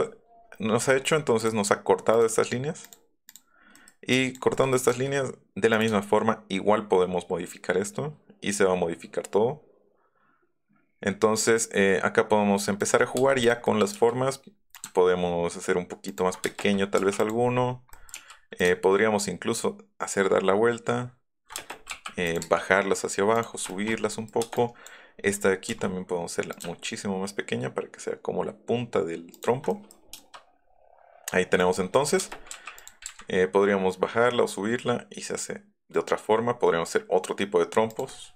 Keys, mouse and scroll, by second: 1.4 click, 2.1 click, 2.8 click, 3.3 click, 3.7 click, 4.1 click, 4.5 click, 5.0 s, 5.7 click, 12.8 ctrl+click, 13.2 space, 13.4 click, 13.6 middle click, 13.8 s, 14.7 ctrl+click, 16.0 ctrl+click, 16.4 space, 17.0 m, 17.2 click, 17.9 click, 18.1 s, 21.7 m, 22.2 click, 23.3 click, 24.3 space, 24.8 click, 25.0 click, 25.5 click, 26.5 click, 29.3 ctrl+click, 30.1 shift+middle click, 31.6 middle click, 32.2 space, 32.2 click, 32.6 m, 32.7 click, 33.0 Up, 37.8 click, 38.0 middle click.